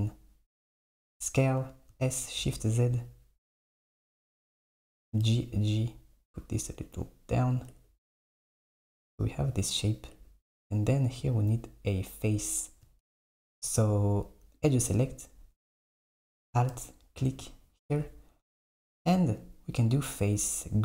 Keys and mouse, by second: 2.1 s, 5.1 g, 7.8 Tab, 8.8 Tab, 10.2 Tab, 13.5 Tab, 14.6 click, 16.9 alt+click, 19.9-20.8 drag.